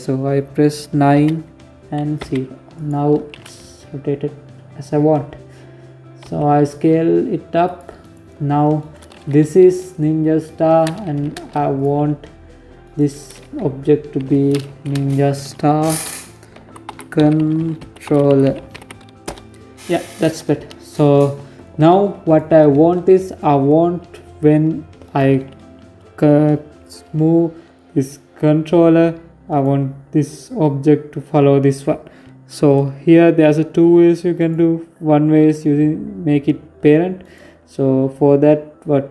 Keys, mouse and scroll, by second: 5.1 s, 6.9 right click, 7.6 right click, 8.2 F2, 11.7 right click, 13.0 F2, 17.3 l, 21.1 right click, 23.9 right click, 28.3 right click, 33.2 right click, 36.0 right click.